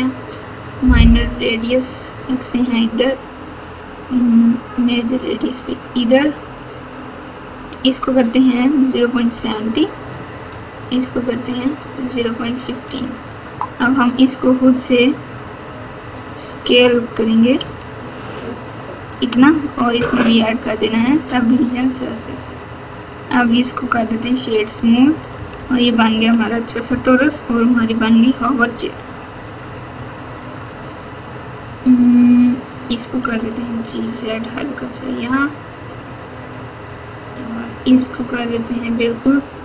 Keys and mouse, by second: 0.2-2.5 drag, 3.4-5.0 drag, 6.1-7.4 drag, 8.9 click, 9.2 click, 11.2 click, 11.7 click, 13.9 click, 17.6 s, 20.4-22.0 drag, 23.0-24.1 right drag, 25.3 KP_8, 25.5 KP_8, 26.0 KP_8, 26.8 KP_1, 30.4-30.8 drag, 33.2 g.